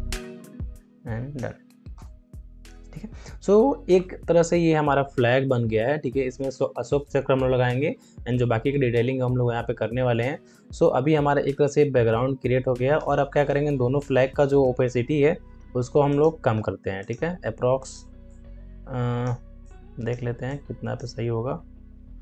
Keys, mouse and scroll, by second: 1.9 Return, 15.8 shift+Num_Lock, 16.0-22.2 shift+drag.